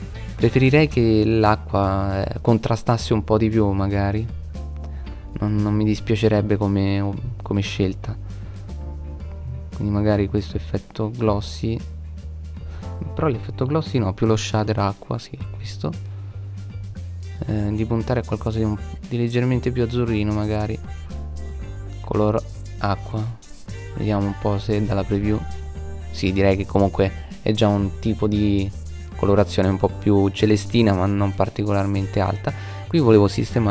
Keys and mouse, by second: 0.0 Escape, 5.8 middle click, 8.2 middle click, 20.0-23.4 middle drag, 25.3 middle click, 30.5-31.9 right drag.